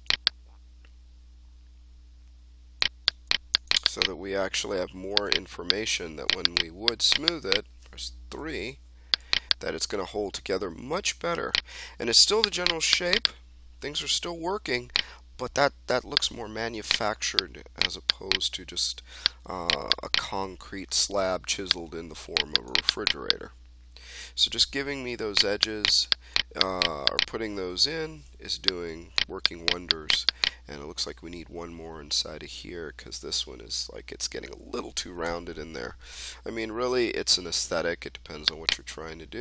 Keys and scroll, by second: 8.3 3, 28.0 1, 33.4 3, 35.2 1.